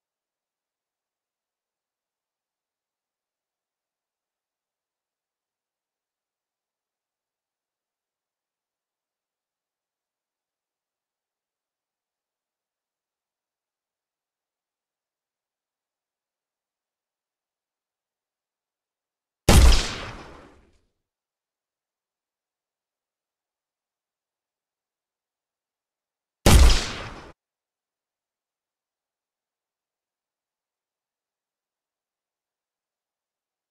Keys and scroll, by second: 3.4-4.4 typing, 4.8 Return, 15.7 w, 18.6 a, 24.5 w, 25.6 d, 27.2 Escape.